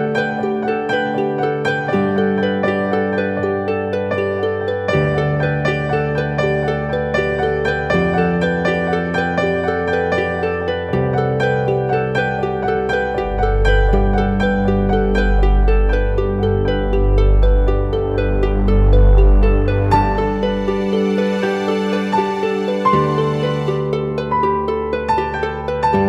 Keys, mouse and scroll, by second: 0.3-2.1 typing, 2.9 double click, 8.0-8.4 typing, 8.7 double click, 10.5 right click, 12.0-13.5 typing.